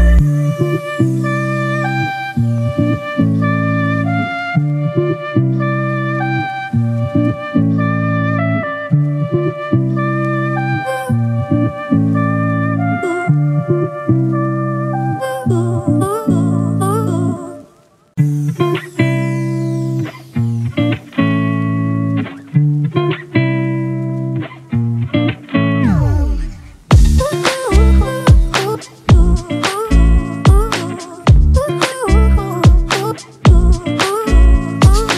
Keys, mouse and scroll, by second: 10.8 typing, 13.5-17.2 typing, 17.1 double click, 19.5 ctrl+-, 19.6 ctrl+-, 19.8 ctrl+-, 20.7 ctrl+-, 26.6-28.6 scroll down 1, 28.6-30.9 scroll up 1.